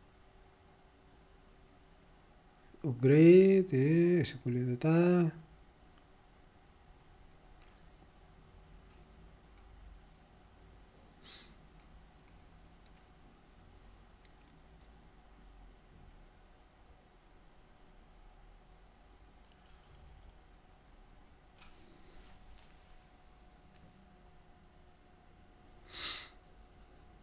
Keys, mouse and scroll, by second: 2.6 scroll down 2, 3.7-4.0 scroll down 2, 4.2-4.6 scroll down 2, 5.4-6.2 scroll down 4, 6.7 scroll down 2, 9.5-9.9 scroll down 1, 11.1-11.8 scroll down 1, 11.8-12.5 scroll down 1, 17.4-17.9 scroll down 2, 20.0-20.5 scroll up 1.